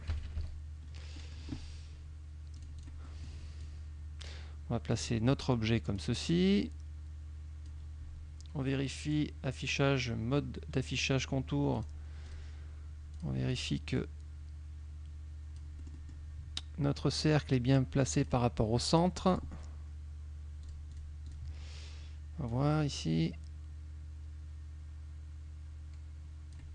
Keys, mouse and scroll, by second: 0.2 KP_Subtract, 1.3 click, 2.7 click, 3.3 click, 3.7-5.2 drag, 6.1-8.0 drag, 9.2 click, 11.9 click, 12.4 click, 13.3 click, 14.1-16.4 drag, 17.1-18.5 drag, 19.4 click, 20.7 click, 22.5-26.7 drag.